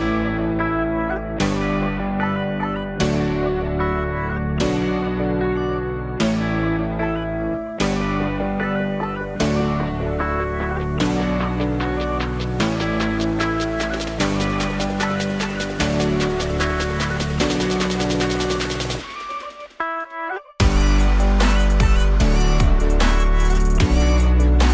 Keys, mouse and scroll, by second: 2.2-4.7 drag, 5.9-8.4 drag, 9.6 click, 16.9-19.4 drag, 19.7 alt+middle drag, 20.0-20.4 alt+drag.